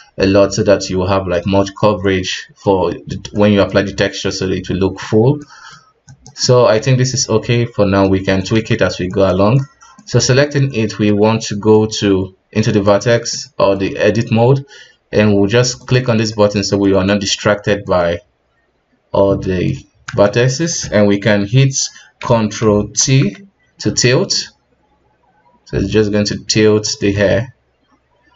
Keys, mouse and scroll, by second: 6.1 right click, 6.4-8.5 middle drag, 8.5 alt+a, 9.0 right click, 9.5-10.3 middle drag, 10.3 Tab, 10.7-15.7 middle drag, 15.7 click, 16.3-19.7 middle drag, 19.7-20.2 scroll up 1, 20.2-23.0 shift+middle drag, 23.0 ctrl+t, 27.1-28.3 middle drag.